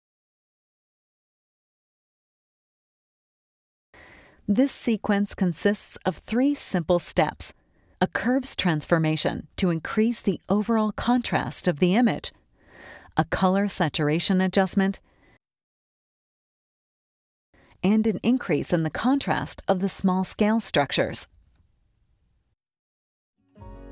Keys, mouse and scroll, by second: 2.2 click, 4.1 click, 6.4 click, 7.7 click, 10.5 click, 12.5 click, 14.2-15.3 drag, 16.4 click, 17.5 click, 19.0-20.9 drag, 22.5 click.